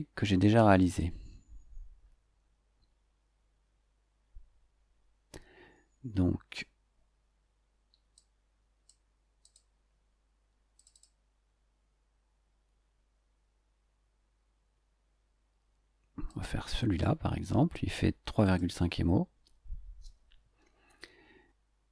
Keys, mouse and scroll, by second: 0.8 click, 8.1-9.0 drag, 9.4 click, 10.7 click, 13.5-13.8 scroll down 1, 16.2 click, 18.4 click.